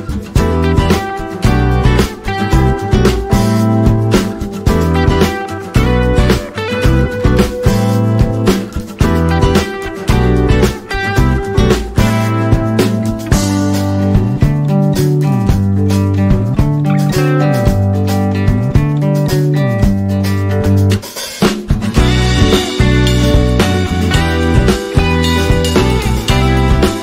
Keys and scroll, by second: 7.1 Escape, 8.3 F12.